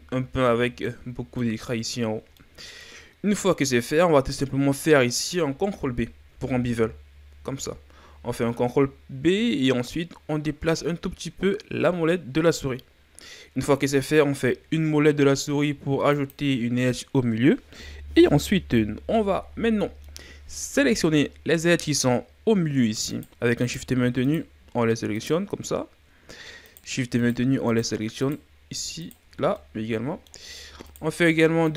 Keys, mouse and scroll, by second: 0.0-0.5 scroll down 3, 0.5-3.3 middle drag, 3.3-3.8 scroll up 1, 3.8-6.2 middle drag, 6.2 ctrl+b, 20.1-21.4 middle drag, 21.4-21.8 scroll up 1, 21.8 middle click, 22.1 scroll up 1, 23.1 right click, 23.6 shift+right click, 24.2 shift+right click, 25.1 shift+right click, 26.7 shift+right click, 27.2 shift+right click, 27.7 shift+right click, 28.2 shift+right click, 29.0 shift+right click, 29.5-30.8 middle drag, 30.8 shift+right click, 31.6 shift+right click.